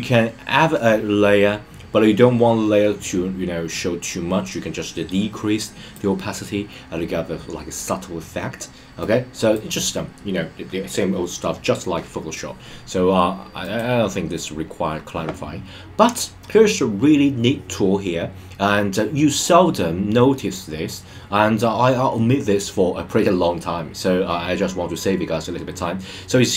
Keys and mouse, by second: 9.0-9.5 drag, 13.6 click.